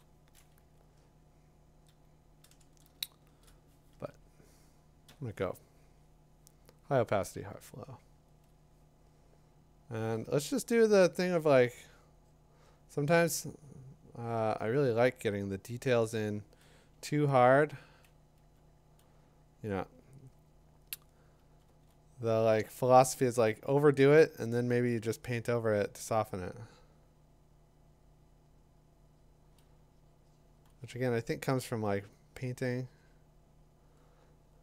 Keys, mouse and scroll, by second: 1.1-1.9 typing, 3.3 shift+7, 5.1 0, 8.5-20.8 drag, 21.7 2, 24.5 [, 25.7 [, 30.6 ], 30.9 ].